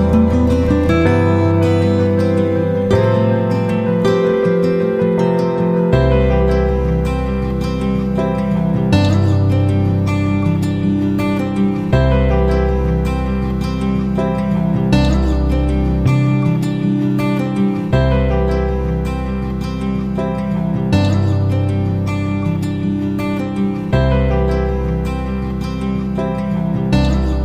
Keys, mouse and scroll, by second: 1.2-3.7 typing, 5.2-27.4 drag.